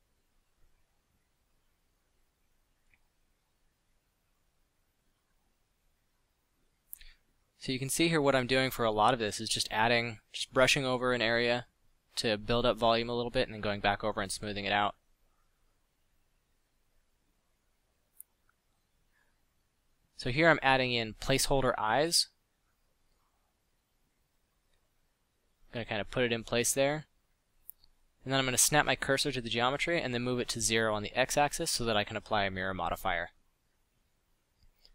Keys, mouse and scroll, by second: 13.8 f, 17.4 space, 18.5 Down, 18.7 Down, 21.3 Tab, 21.5 s, 21.9 Tab, 22.1 g, 22.8 g, 23.3 s, 24.9 g, 25.9 g, 28.3 shift+s.